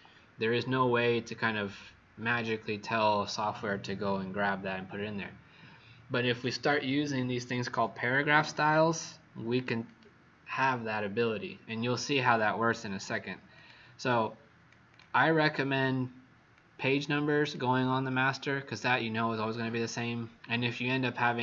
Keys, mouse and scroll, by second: 8.4 click, 14.0 click, 14.8 click.